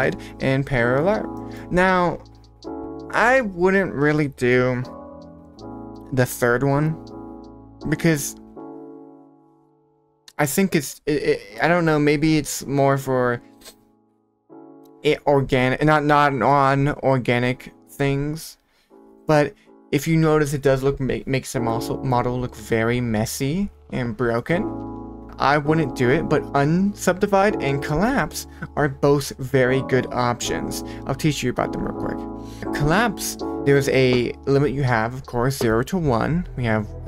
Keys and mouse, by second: 0.1 drag, 1.3 middle click, 8.0 click, 8.2 click, 8.4 click, 8.7 click, 9.2 click, 10.7 click, 10.9 click, 11.1 click, 11.6 click, 11.7 click, 12.3 click, 13.5 click, 13.7 click, 17.5 click, 17.9 click, 20.1 click, 21.5-22.1 middle drag, 22.6 Tab, 24.3 Tab, 24.3 middle click, 26.1 click, 27.5 click.